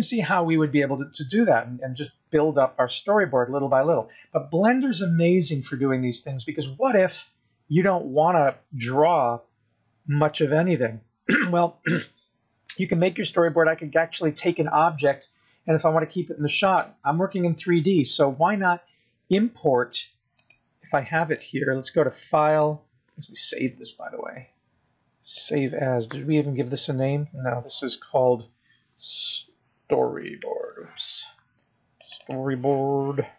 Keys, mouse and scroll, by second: 2.1 scroll down 3, 2.9-5.2 scroll up 3, 12.0-12.5 scroll down 1, 12.5 scroll down 1, 20.6 click, 22.8 click.